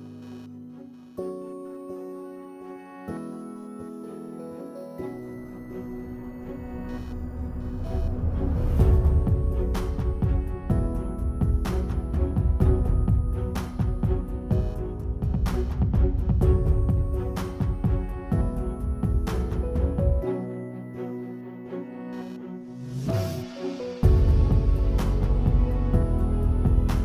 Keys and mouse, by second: 0.3 Tab, 0.6 3, 1.2-2.5 ctrl+drag, 2.6 alt+click, 3.3 alt+click, 3.6 alt+shift+click, 4.3 shift+click, 4.7 shift+click, 4.9 alt+click, 6.0 alt+click, 6.3 shift+click, 6.5 click, 6.7 alt+click, 7.3-10.2 typing, 7.9 Tab, 8.0 click, 8.5 Tab, 11.2 click, 11.3 x, 11.7 x, 12.4 x, 12.7 click, 12.8 x, 13.4 alt+click, 13.7 click, 14.0 click, 14.1 click, 14.9 click, 15.3 click, 15.5 alt+click, 16.1 click, 16.5 click, 17.3 x, 17.7 click, 17.8 x, 18.2 click, 18.3 x, 18.6 ctrl+z, 18.8 click, 19.4 click, 20.5 Tab, 20.9 alt+click, 21.6 Tab, 21.9 x, 22.3 click, 22.4 x, 22.6 x, 22.7 click, 23.0 alt+click, 23.2 Tab, 23.4 Tab, 24.2 click, 24.9 click, 26.2 click, 26.6 click.